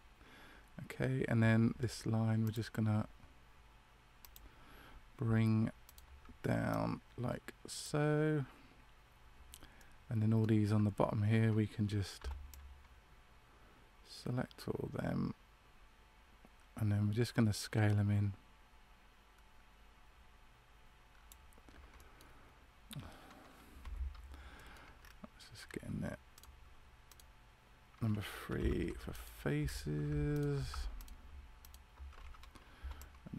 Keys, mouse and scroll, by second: 2.4 click, 5.8 alt+right click, 6.6 click, 9.7 middle click, 12.1 c, 24.5 middle click, 24.9 scroll up 1, 26.3 alt+right click, 26.3 scroll up 2, 27.0 right click, 28.5 3, 29.0 right click, 29.6 right click, 30.3 alt+shift+right click, 32.7 c.